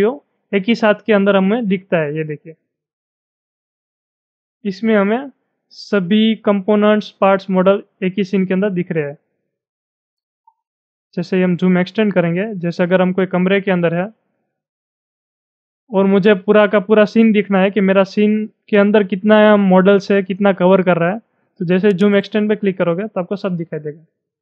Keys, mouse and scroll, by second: 2.9-6.1 middle drag, 9.0-9.9 scroll up 13, 10.7 scroll up 6, 11.3 middle click, 12.1-12.5 scroll up 5, 12.9 scroll up 3, 12.9 middle click, 13.1 middle click, 13.5 shift+middle click, 15.0 shift+middle click, 21.9 click, 23.6-24.1 scroll down 9.